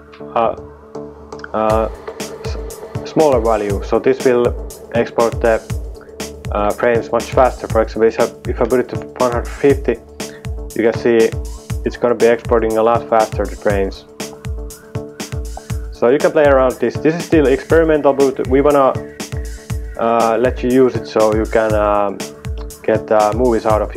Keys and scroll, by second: 0.0-1.4 typing, 8.5-9.4 typing, 18.6 super+Tab.